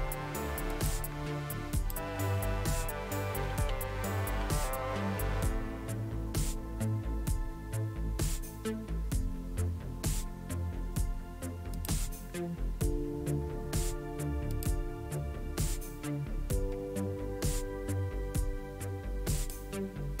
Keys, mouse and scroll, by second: 0.7 click, 1.8 click, 9.4-10.0 scroll down 2, 10.6 scroll down 2, 11.8 click, 14.6 click, 17.0 scroll down 2, 19.4 click.